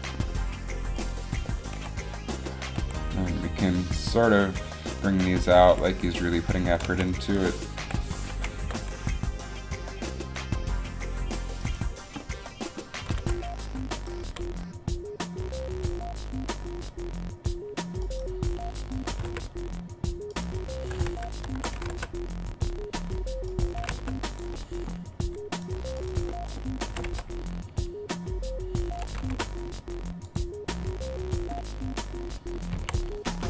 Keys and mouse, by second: 1.2 right click, 1.9 KP_1, 2.9 r, 5.3 right click, 5.8 r, 7.0 a, 7.9 KP_3, 8.8 g, 13.1 g, 14.4 g, 19.0 click, 19.3 r, 21.3 alt+r, 22.0 r, 23.9 r, 24.6 r, 25.8-27.0 drag, 27.0 g, 27.8 g, 29.3 g, 29.5 g, 32.0 g, 32.9 a.